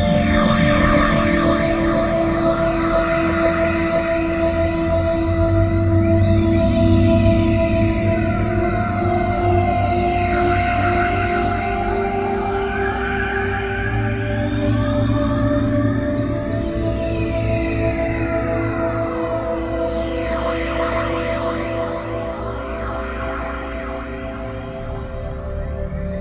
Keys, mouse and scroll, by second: 4.3 click, 5.3 click, 10.5 Escape, 11.9 click, 12.9 scroll up 4, 18.3 Escape, 20.8 click, 23.9 click, 24.4 click, 24.9 click, 25.4 click.